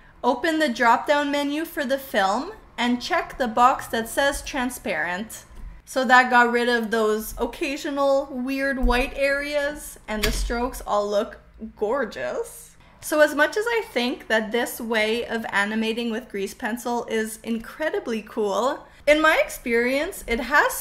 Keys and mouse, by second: 4.3 click, 5.6-8.9 drag, 10.2 space.